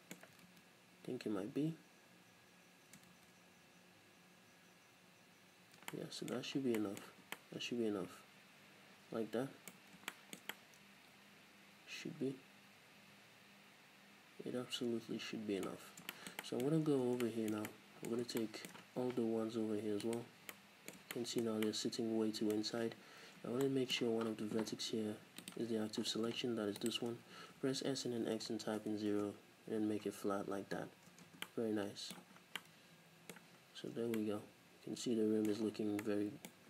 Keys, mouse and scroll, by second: 2.6 ctrl+z, 5.6 ctrl+shift+z, 6.6 scroll down 2, 7.3 Tab, 9.8-10.1 scroll up 2, 15.7-16.1 scroll up 2, 16.4-20.2 middle drag, 16.7-17.1 scroll up 2, 17.1 Tab, 19.1 z, 20.2 alt+right click, 20.5-25.8 middle drag, 22.8 z, 25.8 click, 25.8-26.3 scroll up 1, 26.8 shift+right click, 27.4 s, 29.2 Return, 30.1 scroll down 1, 31.4 Tab, 31.5-36.6 middle drag, 32.4 scroll down 1, 33.6 scroll down 1, 33.9 a, 35.7 scroll down 1, 36.5-36.6 scroll up 2.